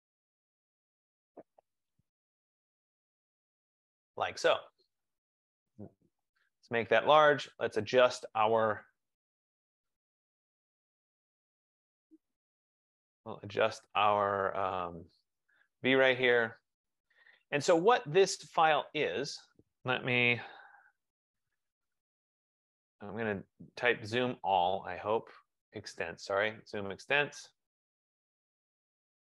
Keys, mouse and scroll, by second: 5.7 click, 7.4 click, 8.6 click, 9.8 click, 10.6 click, 11.6 click, 12.4 click, 13.5 right click, 15.6 click, 18.2 click, 20.7 z, 21.1 Return, 22.2-22.9 typing, 24.6 Return, 26.4 click.